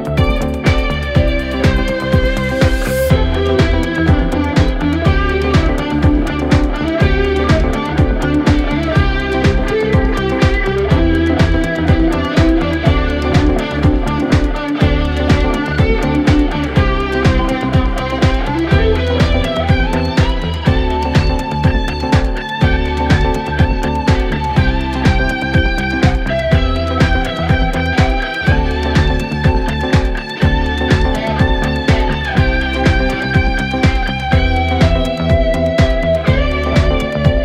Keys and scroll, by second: 0.5-1.5 typing, 7.9-9.9 typing, 23.1 3, 25.2 4.